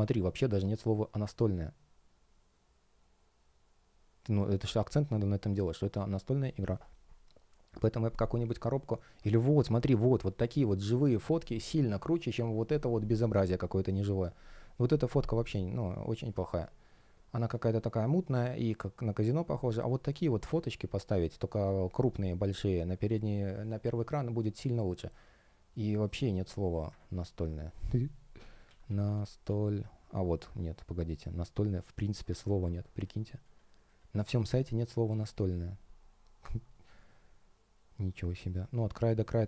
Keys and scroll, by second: 27.1 super+f.